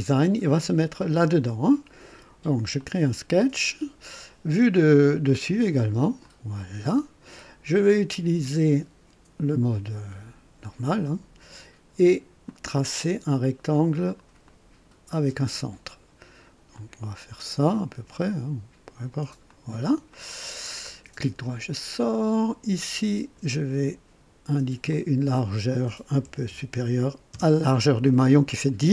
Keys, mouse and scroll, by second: 2.7 click, 5.2 click, 6.2 click, 11.0 click, 12.4 click, 14.4 click, 16.7 click, 19.4 click, 20.1 right click, 20.8 right click, 22.8 click, 24.9 click, 26.2 KP_1, 26.5 KP_2, 27.3 Return.